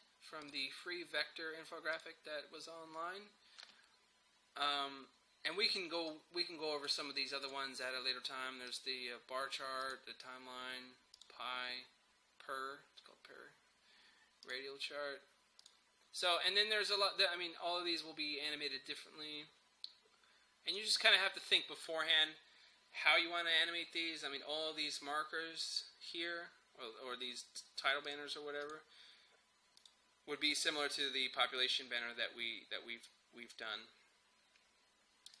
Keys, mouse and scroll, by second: 0.5 click, 6.2-7.5 drag, 14.5 click, 20.8 click, 28.1 click.